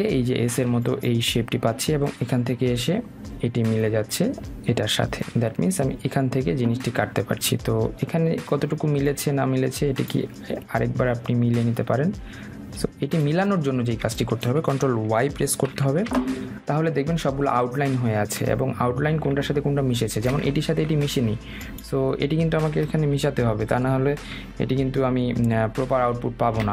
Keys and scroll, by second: 16.5 ctrl+y, 25.1 Right.